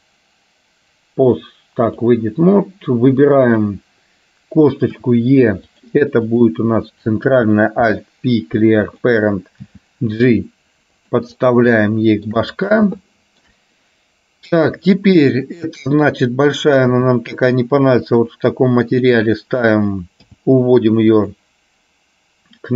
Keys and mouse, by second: 3.4 click, 6.4 click, 7.9 alt+p, 9.8 g, 11.9 shift+middle click, 13.2 shift+middle click, 16.1 click, 16.9 g, 20.3 g.